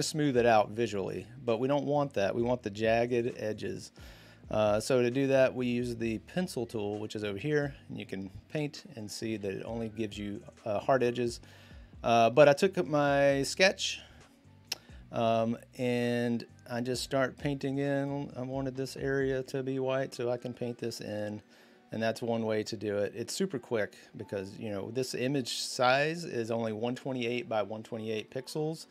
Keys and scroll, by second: 2.9 ctrl+z, 4.5 b, 9.1 ctrl+z.